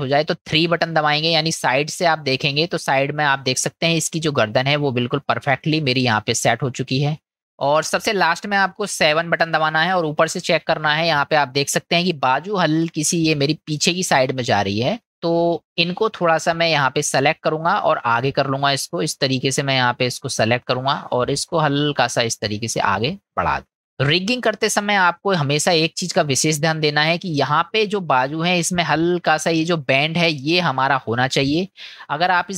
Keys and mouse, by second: 1.2 KP_3, 5.0-7.4 middle drag, 10.0 KP_7, 18.3-20.3 drag, 21.4-23.8 drag, 24.8-27.3 middle drag, 31.9 click.